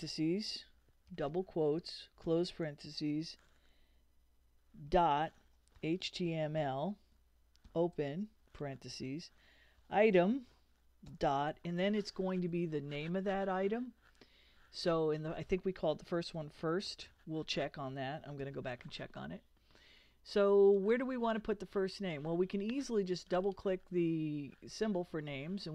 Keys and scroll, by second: 1.1 shift+', 2.2 shift+0, 4.9-7.6 typing, 9.6-11.1 typing, 15.9-18.4 typing.